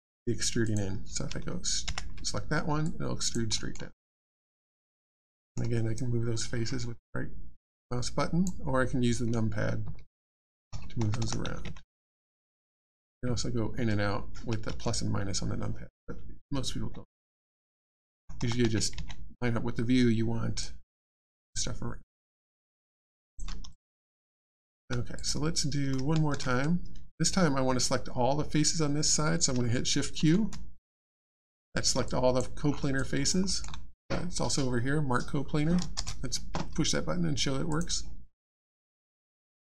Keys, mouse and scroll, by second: 0.1 click, 2.8 alt+click, 3.5 alt+middle click, 4.1 alt+click, 5.2 middle click, 5.9 right click, 9.8 KP_2, 12.5 KP_4, 13.2 KP_Add, 14.3 KP_Subtract, 16.0 KP_Subtract, 16.4 KP_Add, 18.1 KP_4, 20.6 right click, 22.0 KP_4, 23.2 click, 23.7 alt+click, 25.1 click, 30.1 shift+q, 32.0 alt+click, 32.7 alt+scroll up 1, 32.9 alt+click, 33.4 alt+middle click, 35.9 shift+space, 37.7 click, 38.5 alt+click, 39.2 ctrl+click.